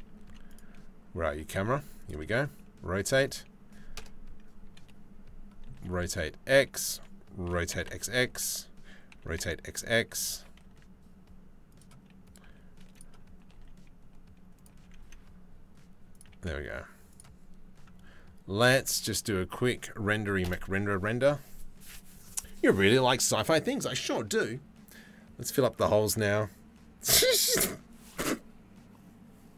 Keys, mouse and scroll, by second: 0.9 g, 1.8 r, 3.6 KP_0, 5.4 r, 7.1 r, 7.3 x, 7.5 x, 8.7 r, 9.9 g, 12.0 g, 13.0 r, 15.9 g.